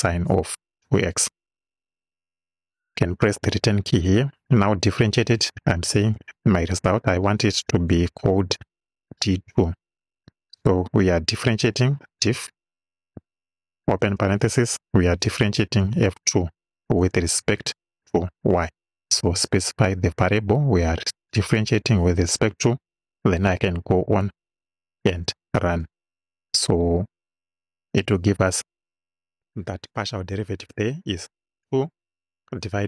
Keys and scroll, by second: 3.3 Return, 6.1 d, 8.5 2, 10.2 =, 11.9 d, 12.4 i, 13.9 shift+f, 14.2 shift+9, 15.6 f, 15.9 2, 17.0 ,, 18.3 y, 24.6 Right.